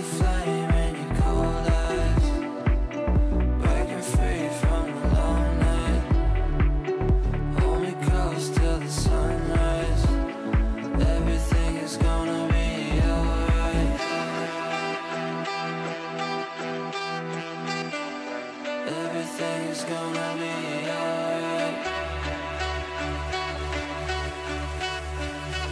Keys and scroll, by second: 17.5 F9.